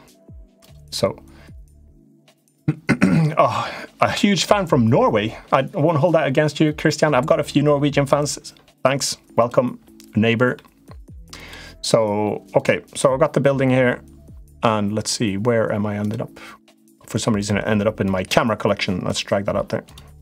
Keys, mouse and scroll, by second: 9.1 click, 10.3 middle click, 11.2 click, 12.3 click, 15.7 click, 16.5 click, 17.1 click, 17.8 click, 18.9 click.